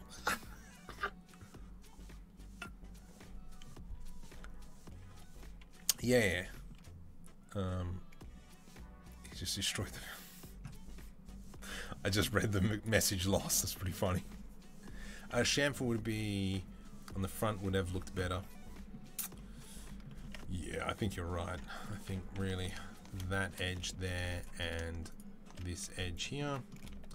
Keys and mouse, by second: 21.9 2, 22.4 click, 22.5-24.6 middle drag, 23.9 z, 25.4-27.1 middle drag, 25.7 z.